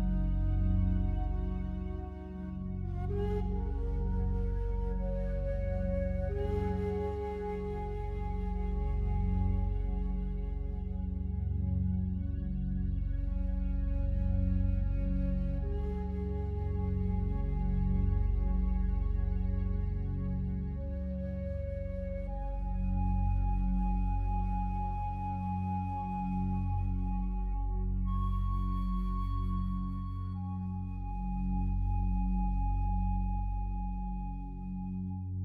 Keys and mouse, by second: 2.6-3.4 drag, 4.0 Right, 4.9 g, 5.2 z, 7.1-8.0 shift+drag, 8.2-10.4 drag, 11.5 Left, 12.1 g, 12.5 z, 14.2-15.1 shift+drag, 15.3 click, 15.7 space, 19.1 space, 21.1 /, 22.2-23.3 ctrl+alt+drag, 23.6 click, 25.4 click, 25.7 click, 26.3 click, 27.7 click, 29.1 click, 30.3 click, 31.3 click, 32.0 click, 33.8 click, 34.8 click.